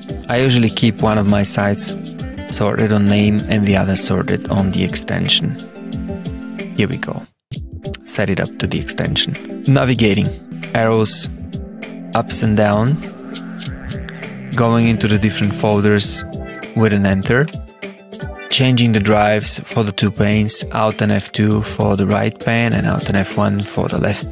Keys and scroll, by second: 3.4 Tab, 17.4 Return, 21.0 alt+F2, 22.7 alt+F1.